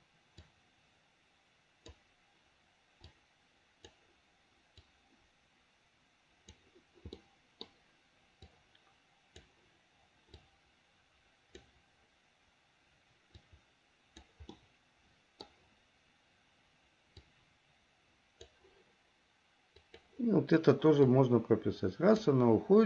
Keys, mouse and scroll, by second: 0.5-2.2 drag, 3.2 click, 5.0-6.8 drag, 7.4 middle click, 8.6-9.7 drag, 10.5-11.9 drag, 13.5 click, 14.7 middle click, 17.3-18.7 drag, 20.0 click, 21.3-22.5 drag.